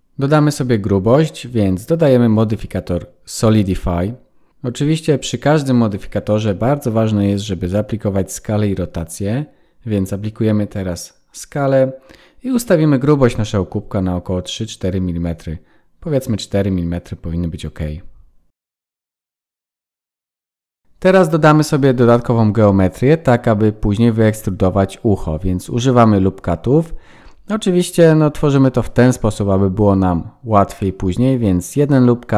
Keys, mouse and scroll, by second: 0.7 click, 9.5 ctrl+a, 14.3 click, 20.3 click, 20.8-22.4 scroll up 7, 27.5 ctrl+r.